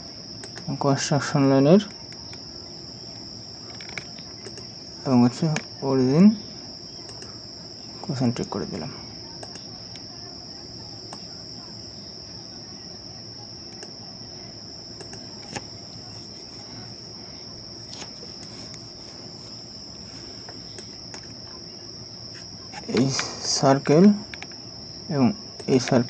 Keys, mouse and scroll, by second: 0.5 right click, 2.9 right click, 4.1 right click, 4.8 right click, 4.8 ctrl+click, 9.6 Delete, 10.2 Delete, 10.5 Delete, 11.7 Delete, 15.0 Delete, 20.6 right click, 23.2 right click, 24.4 ctrl+click.